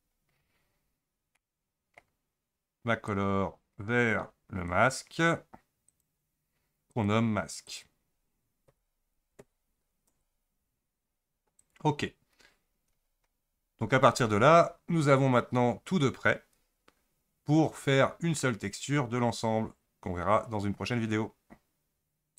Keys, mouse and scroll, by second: 0.4-1.3 scroll down 11, 1.3-3.1 middle drag, 3.1-6.0 drag, 6.9 click, 7.7-10.8 drag, 11.6 click, 16.5 Tab, 17.4-18.7 scroll up 1.